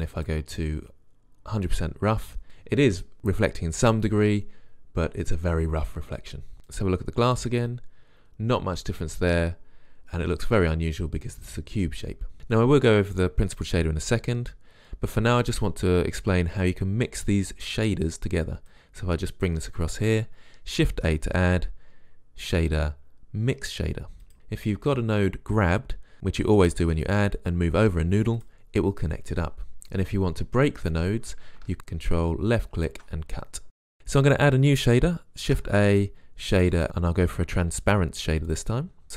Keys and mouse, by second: 21.1 shift+a, 33.1 click, 35.6 shift+a.